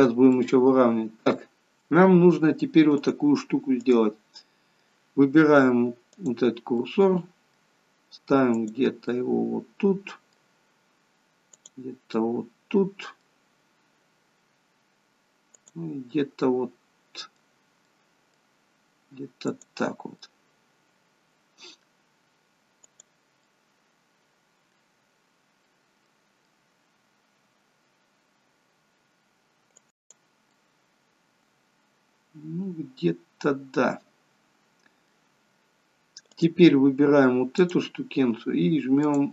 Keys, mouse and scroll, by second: 0.5 middle click, 3.1 click, 4.5 middle click, 6.3 click, 6.9 middle click, 8.7 click, 9.1 middle click, 11.7 click, 12.3 middle click, 15.8 click, 16.2 middle click, 18.0 middle click, 19.7 click, 20.3 middle click, 23.1 click, 23.5 middle click, 25.7 middle click, 30.1 click, 30.5 middle click, 36.4 click, 37.6 click.